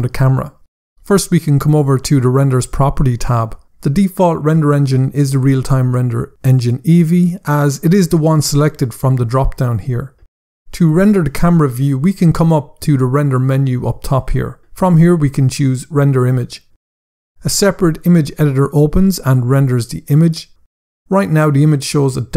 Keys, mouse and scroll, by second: 0.7 click, 1.4 click, 4.1 scroll up 1, 5.2 click, 13.6 click, 17.0 scroll down 1.